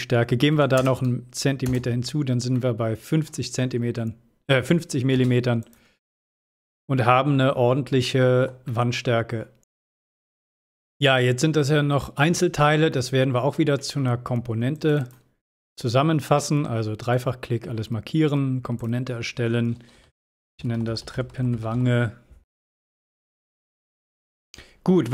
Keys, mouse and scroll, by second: 0.0 click, 3.3-4.3 middle drag, 4.8 scroll down 1, 5.9 space, 6.4 click, 6.8 scroll down 1, 8.8-9.4 shift+middle drag, 10.4-11.0 scroll up 2, 11.0 click, 11.0-11.6 scroll down 2, 11.6-12.1 middle drag, 12.5 shift+middle click, 13.2-13.5 middle drag, 14.7 click, 16.9 right click, 18.8 click, 20.0-22.2 typing, 22.6 click.